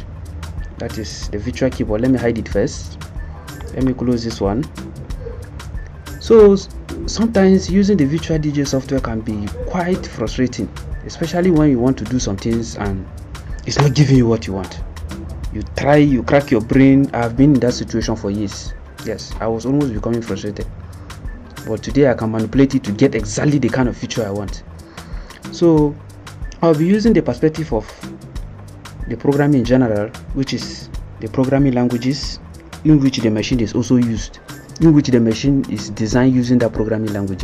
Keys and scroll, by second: 0.6 Return, 0.8 Down.